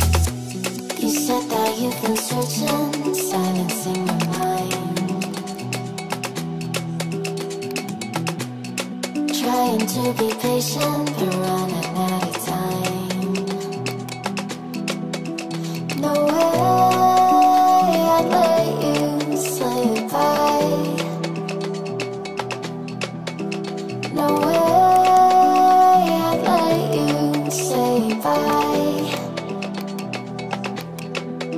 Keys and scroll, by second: 9.4 ctrl+z, 12.7 ctrl+z, 17.3 ctrl+z.